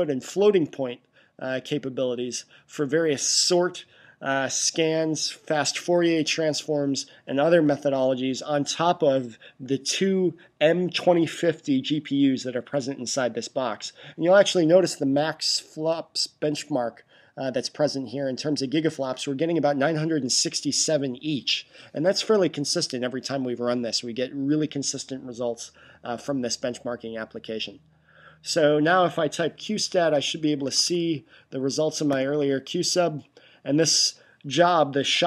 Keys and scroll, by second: 29.7-31.2 typing.